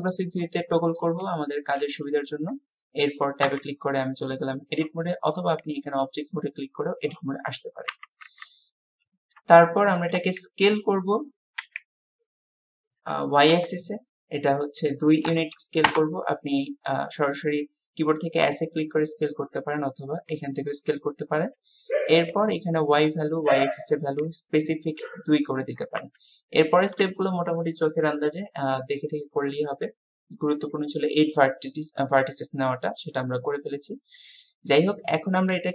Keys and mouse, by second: 3.7 Tab, 6.6 click, 8.0 Tab, 9.6 shift+click, 22.4-25.2 drag, 26.0 Tab.